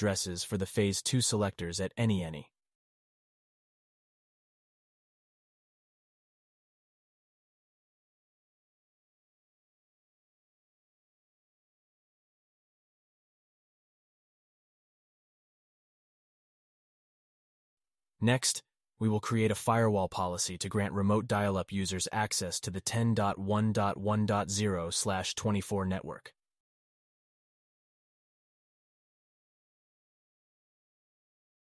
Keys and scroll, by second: 17.7 alt+q, 21.7 alt+q, 24.4 alt+q.